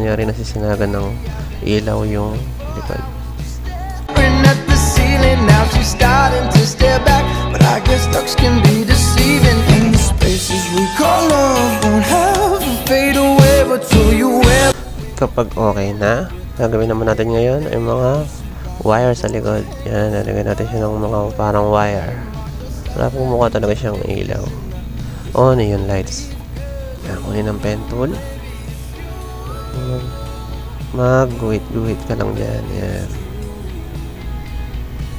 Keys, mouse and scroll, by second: 0.0 click, 1.1 click, 1.9 click, 3.2 1, 3.7 click, 4.1 right click, 4.7 z, 6.3 typing, 6.7 right click, 7.4-8.6 drag, 8.7 click, 10.4 click, 11.6 typing, 12.0-13.3 drag, 13.4-15.3 typing, 13.5 click, 15.0 click, 15.5 click, 16.2 click, 16.6-17.0 typing, 18.3 click, 19.9 click, 21.0 click, 21.1 typing, 21.2 click, 28.3 click, 29.8 click, 32.0 click, 33.8 click, 34.5 click.